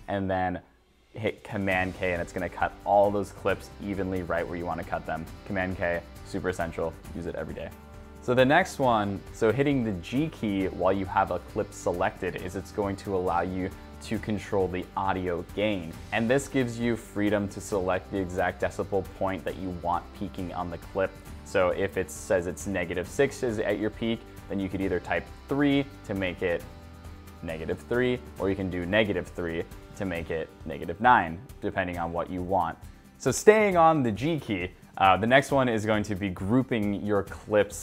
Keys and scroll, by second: 10.0 g.